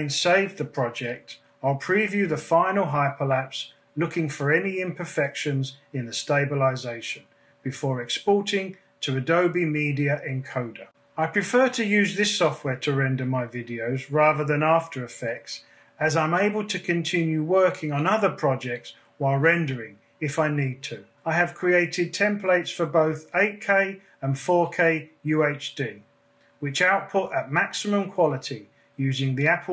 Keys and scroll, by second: 2.7 space, 8.6 super+s.